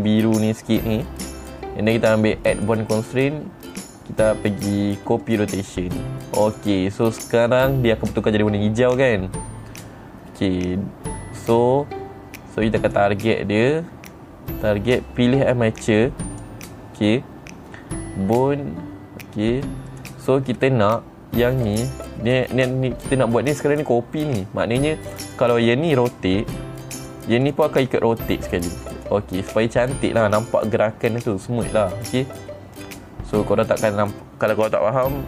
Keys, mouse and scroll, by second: 3.1 click, 5.8 click, 7.0 click, 13.3 click, 16.8 click, 20.4 click, 21.2 middle click, 22.1 click, 22.8 middle click, 22.8-23.6 scroll up 2, 23.6 scroll up 1, 25.7 click, 27.0 r, 27.5 right click, 28.0 click, 28.4 r, 29.5 right click, 30.2 click, 32.6 click, 33.3 middle click, 33.3-35.2 scroll up 2.